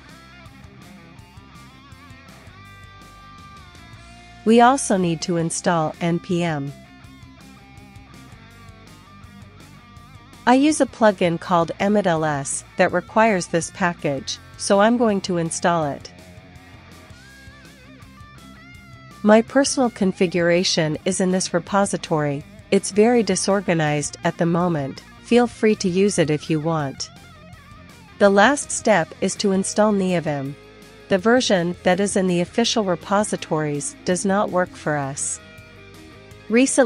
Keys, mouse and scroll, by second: 0.0-2.3 typing, 3.9-4.9 typing, 5.0 Return, 7.8 Return, 7.8 typing, 10.3 super+2, 10.5 super+3, 11.4-14.5 typing, 16.2-17.2 typing, 18.5 super+h, 19.4 click, 21.1 click, 21.9 click, 22.4 ctrl+super+l, 22.6-27.0 typing, 28.5-30.6 typing, 34.9 click, 35.9 click, 36.3 click.